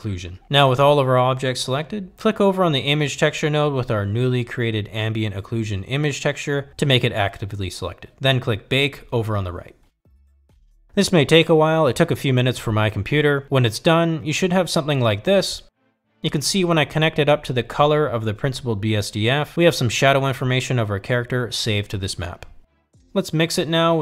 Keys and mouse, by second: 5.0 click, 17.1-18.4 drag, 19.9 click, 22.7-23.5 drag.